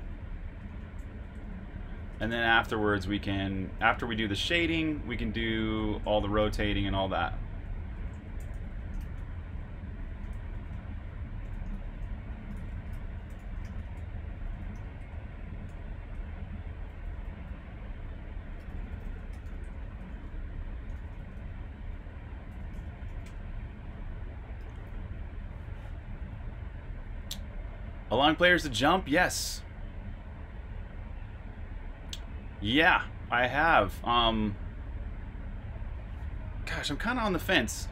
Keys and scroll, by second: 5.5 typing, 7.0-11.4 typing, 18.3-21.1 typing, 22.4-25.8 typing.